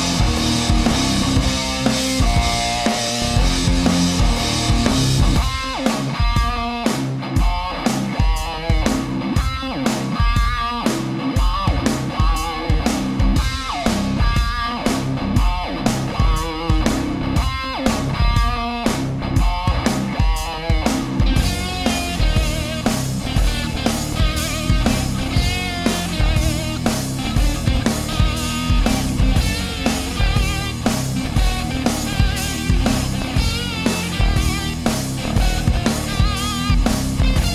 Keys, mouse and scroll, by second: 0.2 click, 1.5 click, 4.4 click, 7.2 click, 8.0 Return, 9.2 right click, 9.9 shift+middle click, 11.1-12.1 drag, 12.1 middle click, 13.6 right click, 14.1 shift+right click, 14.9-16.6 drag, 16.6-17.3 middle drag, 17.6 a, 17.8-21.6 middle drag, 21.8 middle click, 22.1 right click, 23.0-24.5 drag, 25.0-26.3 drag, 26.3-28.5 middle drag, 29.2 a, 29.6-33.7 middle drag, 34.2 right click, 35.3-36.7 drag, 37.0 middle click.